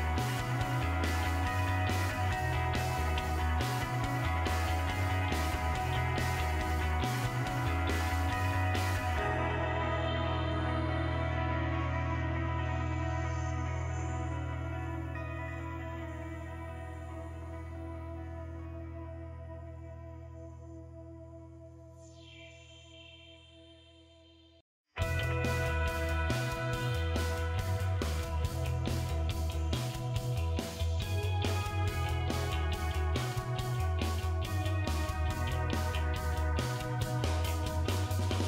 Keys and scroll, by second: 25.8 2, 27.9 BackSpace, 29.6 BackSpace, 29.8 BackSpace, 30.0 BackSpace, 31.5 typing, 33.2-34.0 typing, 35.2 BackSpace, 36.2 4, 37.0 BackSpace, 38.0 3.